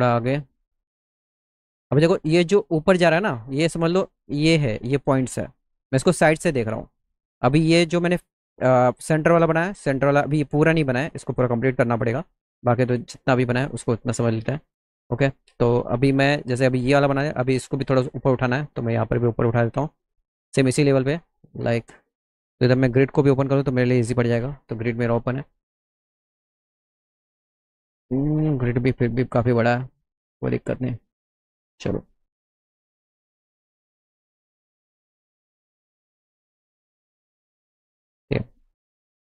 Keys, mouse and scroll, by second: 1.3 shift+click, 24.3 g, 30.2 click, 30.6 click, 34.9 click, 37.6 click, 38.2 middle click.